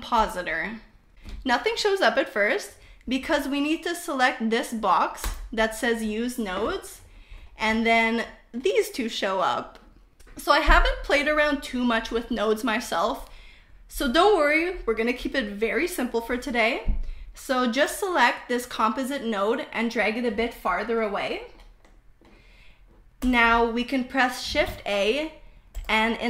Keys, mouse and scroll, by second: 0.0 click, 2.7-3.8 drag, 5.2 click, 8.2 shift+middle click, 15.5 middle click, 19.4-20.6 drag, 21.2 click, 24.3 shift+a.